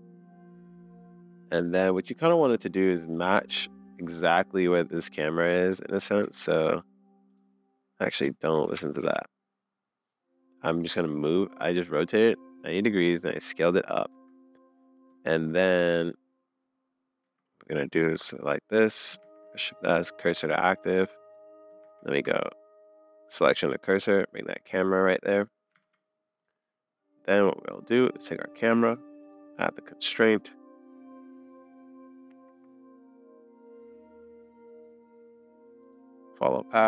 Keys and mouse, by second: 0.2-1.1 middle drag, 1.5-1.9 middle drag, 2.8-3.9 middle drag, 5.6 click, 5.8 middle click, 6.2 s, 8.6 g, 11.2-13.9 middle drag, 14.1 Tab, 14.7 middle click, 15.3 Tab, 15.3-15.9 middle drag, 17.2 Tab, 19.2 shift+s, 20.4 Tab, 21.8 shift+s, 24.6 middle click, 25.8 super+s, 26.0 click, 29.4-31.5 drag.